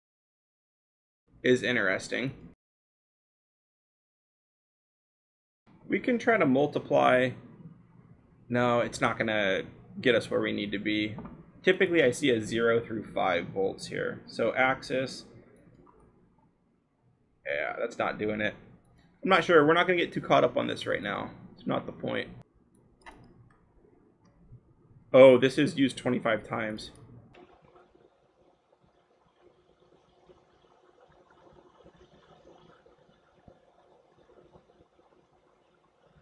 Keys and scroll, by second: 3.1 ctrl+c, 15.8 ctrl+v, 23.6-25.3 scroll, 28.4-28.8 scroll, 29.7-30.1 scroll down 1, 30.3 Down, 30.7-31.2 scroll, 31.2 scroll down 2, 31.4 scroll, 33.0 Down, 34.3 Down, 34.5 Up, 34.7 Down, 35.0 scroll, 36.1-36.2 scroll down 1.